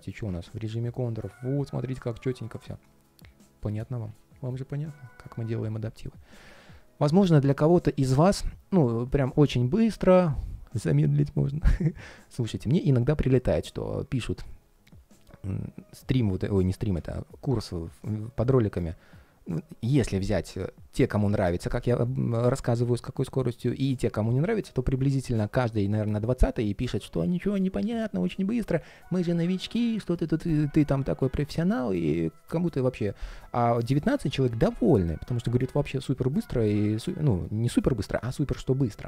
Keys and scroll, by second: 1.8 ctrl+shift+3, 3.8 super+s.